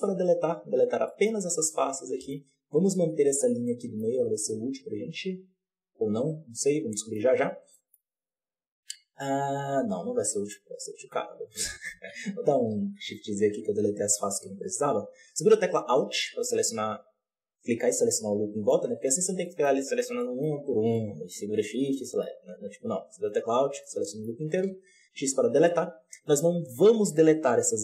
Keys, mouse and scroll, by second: 0.8 scroll down 2, 1.0-4.0 shift+middle drag, 4.0-4.3 scroll up 1, 4.3-7.3 middle drag, 7.3-7.6 scroll down 1, 7.6-10.1 middle drag, 10.1 alt+a, 10.2-11.2 middle drag, 11.2 alt+shift+right click, 12.1 ctrl+z, 12.3 ctrl+z, 13.3 alt+a, 14.0 2, 14.7 alt+right click, 16.1-19.0 middle drag, 19.0 right click, 19.3 middle click, 19.8 shift+right click, 20.1 middle click, 20.5 shift+right click, 20.8 middle click, 21.7 shift+right click, 21.9-22.4 middle drag, 22.4 alt+a, 23.1 alt+right click, 23.7-24.5 middle drag, 24.5 x.